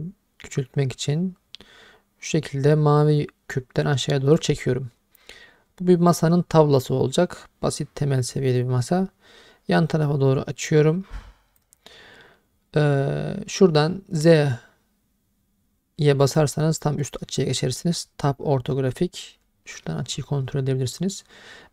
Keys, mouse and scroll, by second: 6.1 click, 16.4 click.